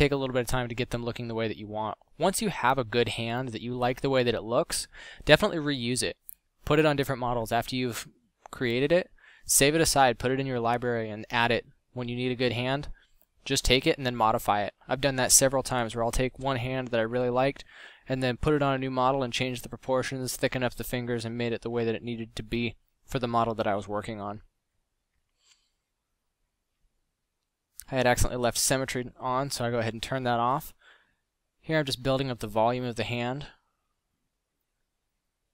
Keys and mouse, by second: 10.2 middle click, 12.5 middle drag, 19.2 f, 22.3 middle click, 25.2 middle drag, 25.9 x, 28.3 ctrl+z, 30.0 click, 31.0 click, 34.4 middle drag.